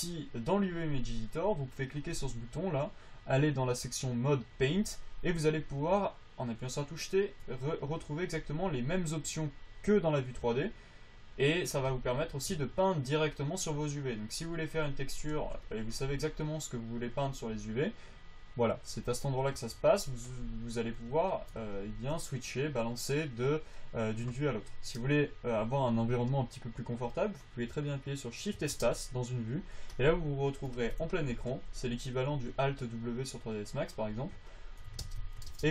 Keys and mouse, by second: 8.5 t, 9.4-16.0 drag, 13.4-16.0 right drag, 16.0 f, 17.7 click, 20.2 f, 20.6-22.2 drag, 29.1 shift+space, 31.8 f, 32.4 f, 32.6 f, 33.4 click, 35.4 shift+space.